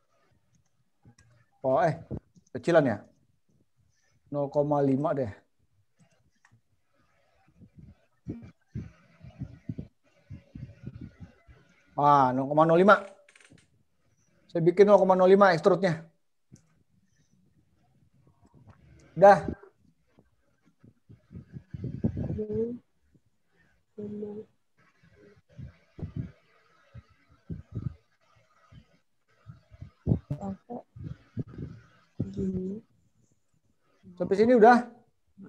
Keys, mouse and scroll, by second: 4.9 click, 28.0-29.3 scroll up 4, 29.3-30.5 scroll down 3, 30.5-31.5 scroll down 1, 33.3 click.